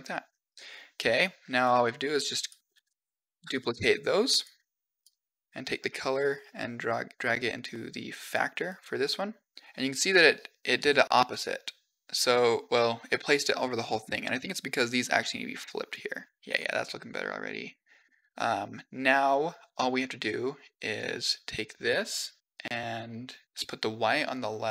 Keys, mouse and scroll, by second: 0.3 click, 0.8 click, 1.4 click, 1.9 click, 3.5 shift+d, 4.8 click, 5.5-6.6 drag, 8.3 click, 8.6 click, 10.9-12.2 middle drag, 15.0 click, 16.4 click, 16.4-17.9 middle drag, 19.8-20.8 drag, 22.4 click, 23.4 click, 24.2-24.7 drag.